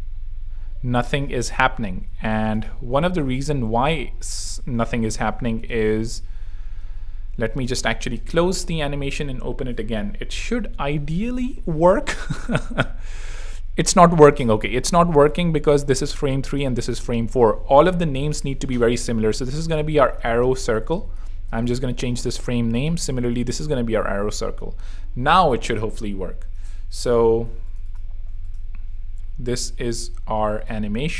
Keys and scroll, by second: 1.9 super+2, 2.3 super+z, 2.8 z, 6.9 super+3, 7.2 super+w, 8.1 shift+super+w, 8.3 shift+super+t, 10.4 super+2, 18.6 super+r, 19.4 shift+super+r, 19.6 shift+super+a, 19.8-21.5 typing, 21.7 super+Return, 22.6 Return, 23.2 super+r, 23.3 super+v, 23.6 super+Return, 24.1 super+3, 25.6 r, 26.8 r, 27.0 super+2, 28.1 alt+z.